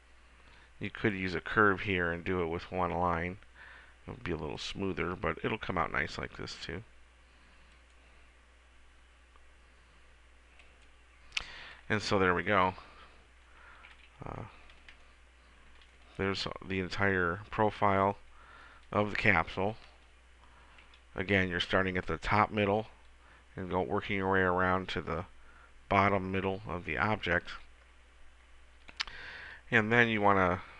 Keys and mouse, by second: 4.8-6.4 drag, 7.9-9.6 drag, 10.7-12.6 drag, 12.6 middle click, 13.6 middle click, 14.2 a, 14.7 a, 21.0 KP_1, 28.2-30.7 middle drag.